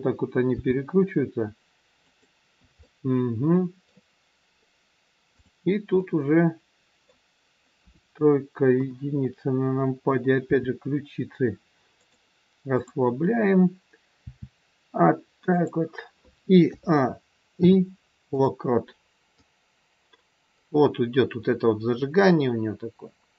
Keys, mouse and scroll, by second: 0.5 g, 2.8 middle click, 5.3 click, 6.2 middle click, 7.7 KP_3, 8.7 KP_1, 10.6 r, 12.7 click, 14.2 r, 16.5 a, 17.5 i, 19.4 click.